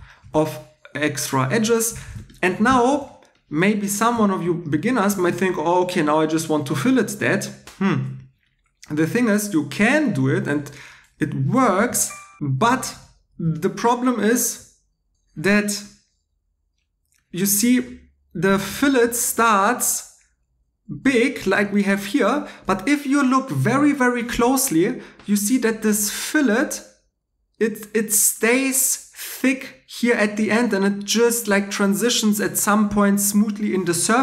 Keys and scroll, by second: 2.1 shift+e, 2.6 shift+e, 8.2 Escape, 11.8 shift+e, 18.7 3.